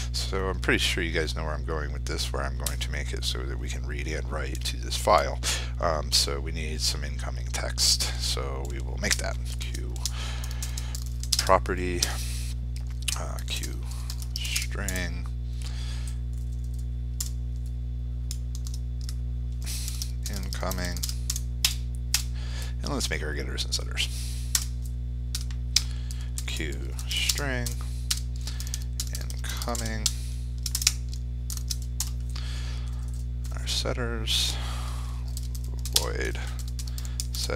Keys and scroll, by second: 2.6 F4, 11.2 ctrl+space.